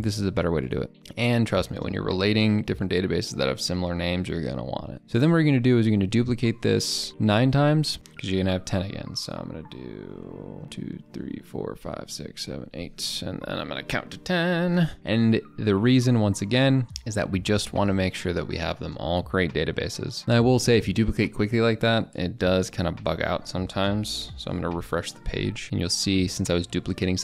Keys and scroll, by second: 10.6 ctrl+d, 10.9 ctrl+d, 11.3 ctrl+d, 11.6 ctrl+d, 24.2 ctrl+r.